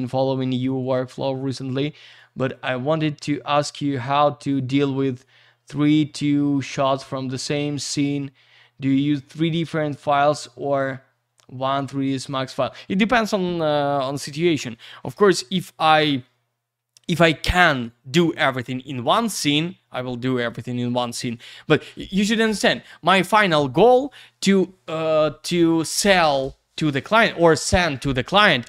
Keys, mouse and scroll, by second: 0.8 click, 0.9 click, 1.2 click, 2.6 click, 3.0 click, 4.5 click, 5.0 click, 5.1 click, 5.7 click, 5.8 click, 11.6 click.